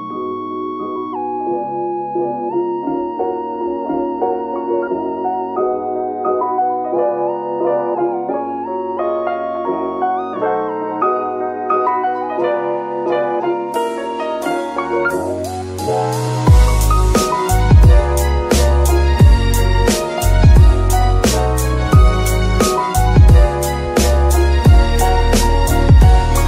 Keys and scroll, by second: 3.6 n, 14.8 KP_3.